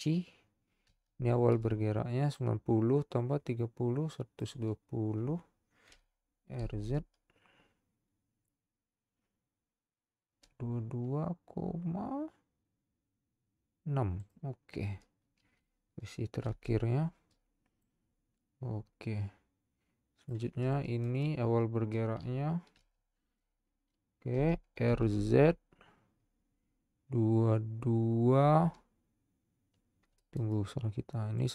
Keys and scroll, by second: 2.4 i, 6.1 r, 6.6 z, 16.4 i, 23.0 i, 24.9 z.